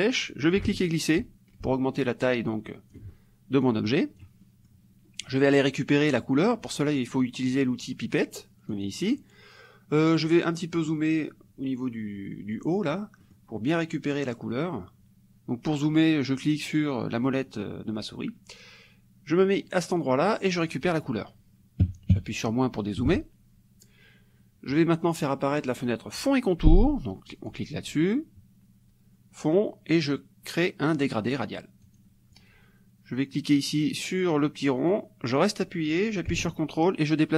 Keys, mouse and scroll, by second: 0.3-3.1 drag, 3.6 click, 4.5 middle click, 8.8 click, 10.7 click, 13.2 click, 13.5 middle click, 14.0-18.3 drag, 20.6 click, 21.9 KP_Subtract, 22.8 middle click, 27.3 click, 31.8 click, 34.9-37.3 drag.